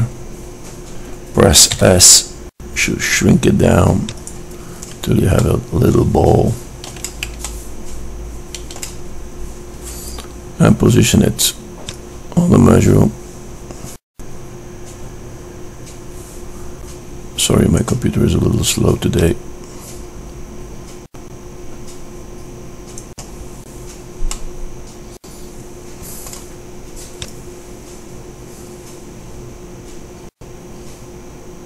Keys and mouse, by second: 2.0 s, 5.9-12.2 middle drag, 12.2-14.4 drag, 20.0 middle click, 20.9-22.9 drag, 26.4-27.7 middle drag.